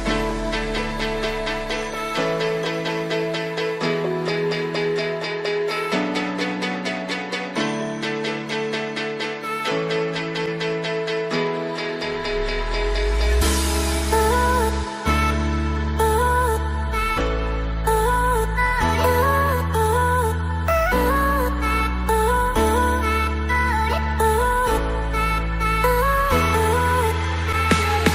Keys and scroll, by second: 10.1 ctrl+g, 11.0 ctrl+e.